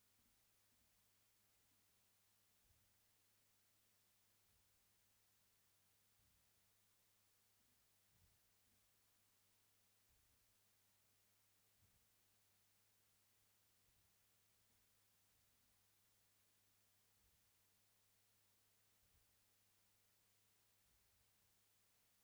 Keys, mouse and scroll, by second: 0.2 g, 0.8 g, 1.7 ctrl+z, 3.3 scroll down 1, 3.6 shift+middle click, 4.0 shift+middle click, 4.3 shift+middle click, 4.6 shift+middle click, 5.4 scroll down 1, 5.5 shift+middle click, 5.9 shift+middle click, 6.3 scroll up 1, 6.4 shift+middle click, 6.9 click, 7.6 g, 8.8 g, 11.0-11.3 scroll down 1, 11.3 shift+middle click, 11.7 shift+middle click, 12.7 shift+middle click, 13.9 click, 14.7 g, 15.4 click, 15.6 g, 16.6 scroll down 1, 16.8 shift+middle click, 17.1 shift+middle click, 18.8 shift+middle click, 19.3-20.6 scroll up 1.